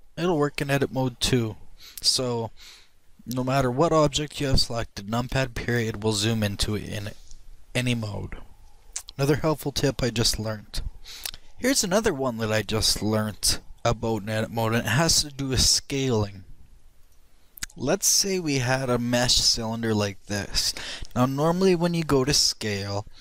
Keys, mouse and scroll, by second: 0.0 KP_Decimal, 0.8-4.1 middle drag, 4.1 right click, 6.1 KP_Decimal.